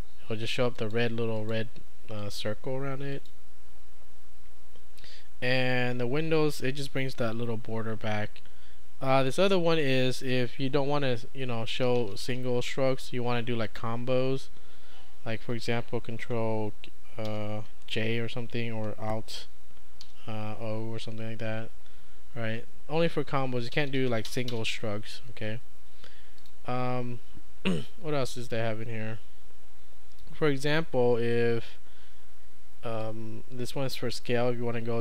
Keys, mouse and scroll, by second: 0.8 click, 2.2 click, 3.1 click, 11.7-12.8 typing, 13.7 click, 17.3 ctrl+j, 20.0 alt+o, 33.1-35.0 drag.